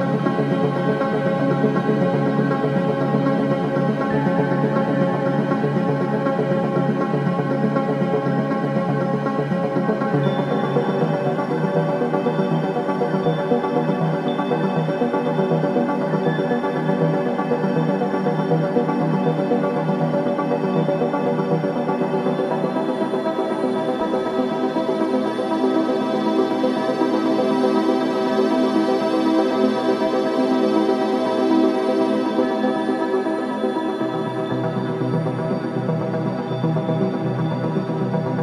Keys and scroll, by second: 3.3 ', 7.0 Delete, 7.8 4, 9.3 3, 10.0 ], 10.3 ], 11.8 ctrl+d, 12.0 Escape, 12.7 /, 19.0 [, 19.1 ], 27.9 F1, 28.1 F2, 35.6 F1, 35.8 F2.